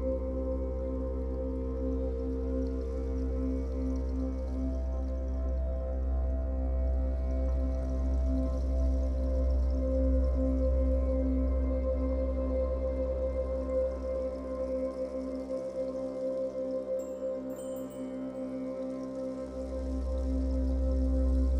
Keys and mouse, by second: 0.3 typing, 1.5-2.6 drag, 2.7 click, 2.9 typing, 3.0 alt+click, 4.4 typing, 5.4 click, 5.8 alt+click, 6.4 ctrl+alt+click, 6.9 alt+click, 8.2 typing, 9.1 click, 9.4-10.4 alt+drag, 12.2 typing, 13.2 click, 14.6-15.4 typing, 15.9 click, 20.6 click.